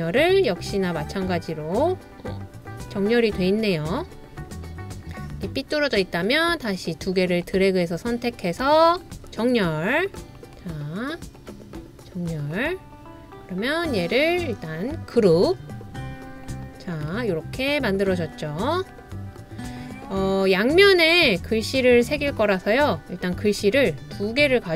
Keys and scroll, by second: 13.4 typing, 22.7 typing.